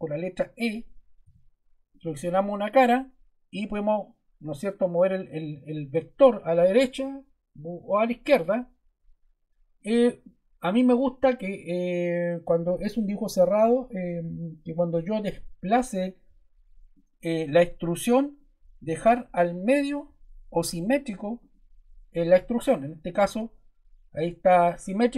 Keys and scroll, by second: 1.2 e.